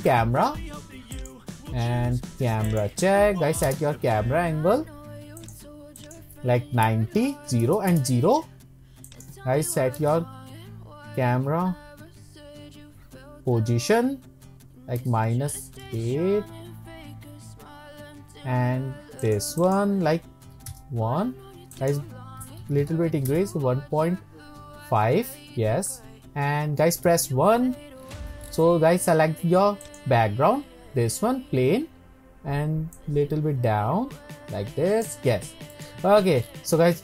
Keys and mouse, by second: 0.1 shift+middle click, 0.2 shift+click, 1.3-3.0 drag, 3.7 ctrl+alt+KP_0, 5.4 click, 6.0 click, 6.0-7.4 middle drag, 7.4 click, 9.1-18.4 drag, 16.8 Tab, 17.2 Tab, 19.2 click, 19.7 click, 20.6 middle click, 21.5 click, 21.7-24.4 drag, 27.1 KP_1, 33.0-35.1 drag, 35.7 middle click.